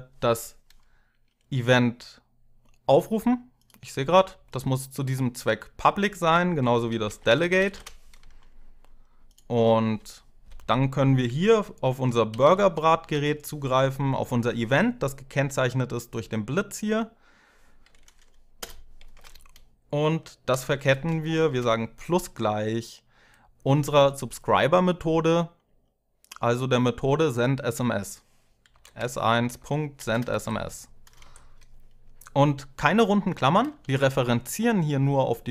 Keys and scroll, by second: 6.4-7.9 typing, 11.8-12.8 typing, 18.4 Return, 18.9 space, 20.8 =, 21.3 space, 28.2-30.6 typing, 31.0 Tab, 33.6 ;.